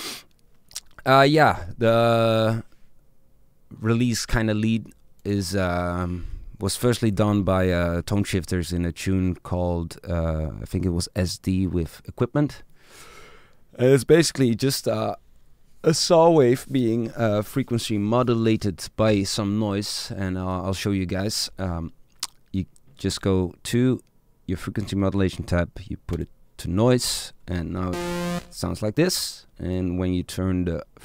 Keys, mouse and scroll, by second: 2.8 Up.